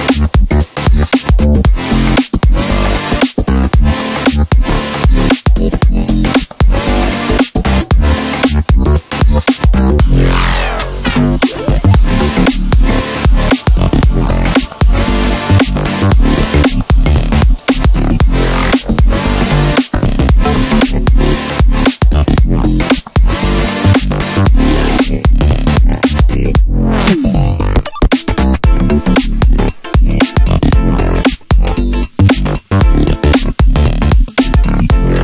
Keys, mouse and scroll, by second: 0.6 KP_1, 2.7 e, 4.2 s, 7.0-8.2 middle drag, 8.2 scroll up 2, 8.8-9.3 scroll down 1, 9.3-12.3 middle drag, 14.3-15.3 drag, 15.3-16.6 scroll down 2, 17.3 click, 18.2-20.3 drag, 22.3 click, 23.2-24.6 drag, 25.1-26.1 drag, 30.8-32.8 drag, 32.8-33.2 scroll up 1.